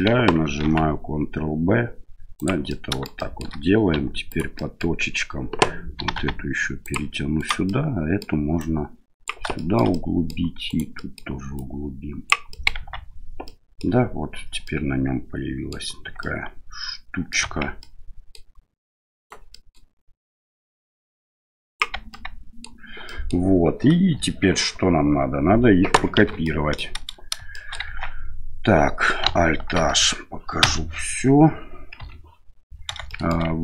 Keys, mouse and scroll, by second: 0.6 ctrl+b, 2.7 click, 3.2 click, 3.9 1, 4.3 right click, 4.5 middle click, 6.0 g, 7.4 right click, 7.6 middle click, 8.6 click, 9.6 shift+middle click, 9.9 middle click, 10.7 right click, 10.9 middle click, 11.5 click, 12.6 middle click, 12.8 Tab, 13.4-13.8 middle drag, 14.6-15.7 middle drag, 16.2-17.3 middle drag, 17.4 Tab, 17.8 middle click, 19.2 right click, 19.5 middle click, 20.6-21.8 drag, 21.9 Tab, 22.1-22.6 middle drag, 23.0 middle drag, 24.1 KP_7, 26.2 shift+z, 26.4-26.8 middle drag, 27.5 shift+middle drag, 27.9 Tab, 29.8 alt+h, 30.6 KP_Divide, 32.0 KP_7, 33.1 shift+middle click.